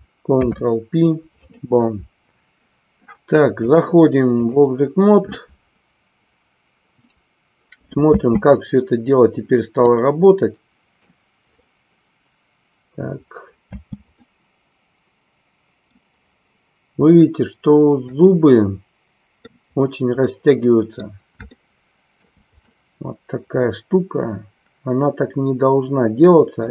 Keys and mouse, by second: 3.6-4.6 drag, 8.2 space, 9.9-11.0 middle drag, 13.8 space, 14.3-16.0 middle drag, 17.1-19.5 middle drag, 20.3 middle click, 21.5 shift+middle click, 22.7-26.7 middle drag.